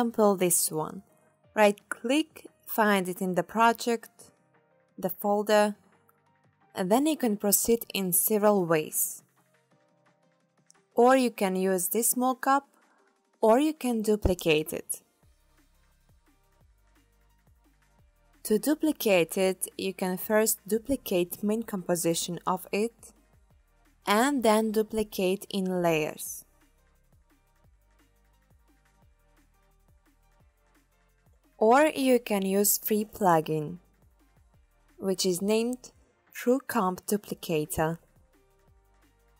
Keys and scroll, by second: 22.8 super+d, 29.5 super+z, 34.5 super+Right.